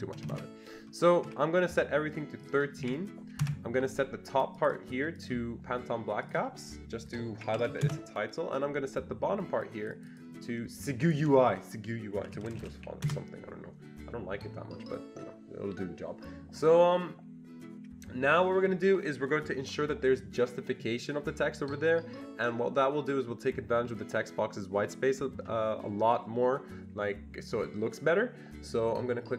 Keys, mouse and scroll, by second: 0.1 BackSpace, 0.3 BackSpace, 1.2 Escape, 2.4 click, 2.5-3.3 typing, 3.4 Return, 4.5 click, 4.7 double click, 5.2 click, 6.3 click, 7.1-8.2 typing, 7.1 click, 9.6 click, 9.9 double click, 10.1 click, 11.0-12.9 typing, 11.1 click, 13.0 Return.